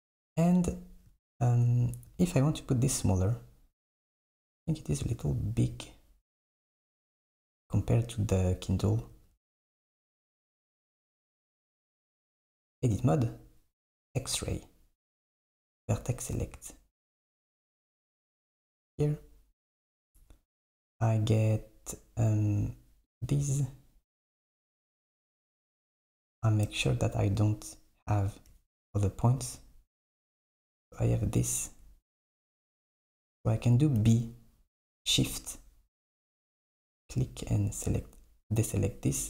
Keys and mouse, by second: 0.5 KP_1, 4.3 KP_1, 9.3 KP_1, 12.0 Tab, 14.1-16.0 drag, 17.8 KP_1, 23.1 click, 29.1 super+click, 34.1 b.